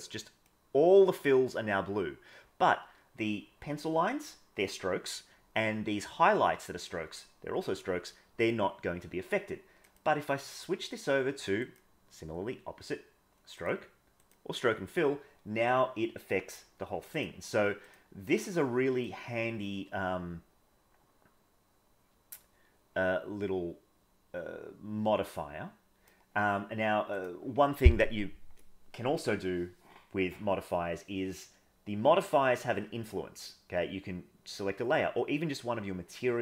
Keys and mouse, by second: 0.0-0.5 middle drag, 9.8-11.8 drag, 13.5-14.4 drag, 17.1-17.9 drag, 19.0-26.1 drag, 27.1 click.